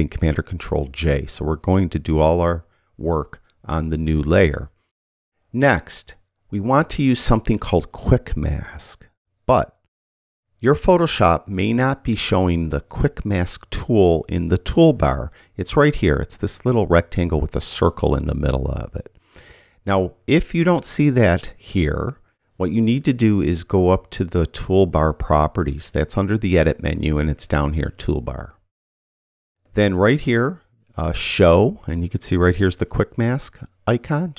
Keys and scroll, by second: 0.9 super+j.